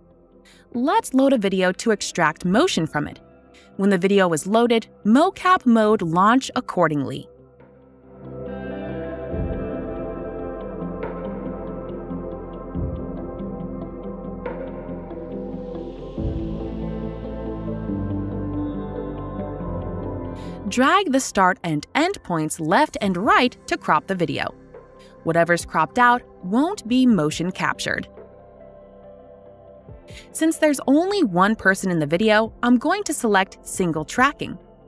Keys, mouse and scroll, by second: 2.6 click, 4.4 click, 4.6 click, 5.6 click, 7.3 click, 15.8 click, 19.3 click, 21.1 click, 26.8 click, 30.8 click, 33.6 click.